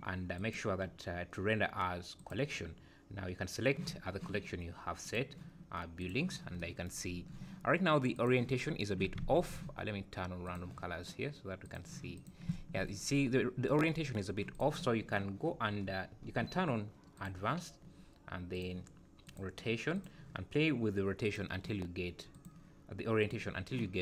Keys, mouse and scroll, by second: 0.4 click, 5.0 click, 8.1 click, 9.2 alt+a, 10.5 click, 12.1 click, 13.1 scroll up 2, 14.2 scroll down 1, 14.5 click, 15.5-16.0 scroll down 8, 16.2-16.5 scroll up 6, 17.2 click, 18.5 click, 19.3 click, 19.9 click, 22.3 click.